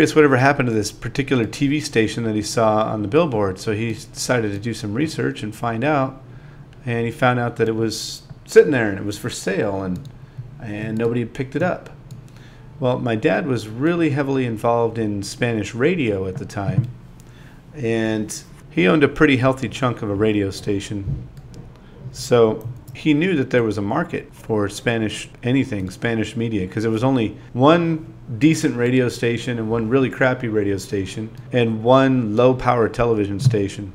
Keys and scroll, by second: 0.3 shift+c, 0.6 0, 1.6 i, 2.5 space, 2.8 space, 4.3 |, 4.5 |, 6.1 BackSpace, 6.4 n, 6.9 super+v, 8.0-8.9 typing, 10.1 space, 10.3 8, 10.6 n, 12.6 z, 14.5 space, 15.2 space, 15.5 9.